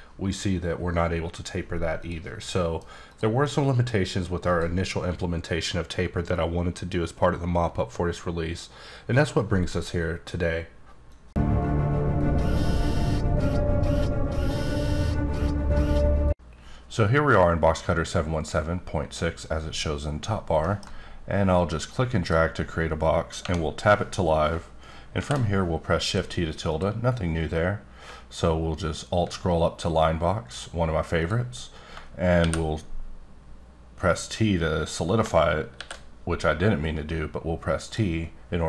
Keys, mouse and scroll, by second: 2.0 click, 2.5 middle click, 3.1 click, 3.4 middle click, 4.5 click, 21.5 click, 23.4 Tab, 25.2 shift+t, 26.0 click, 26.7 click, 27.6 scroll up 2, 28.4 scroll up 1, 29.8 click, 31.2 click, 32.4 shift+t, 34.8 click, 35.9 t, 37.8 click.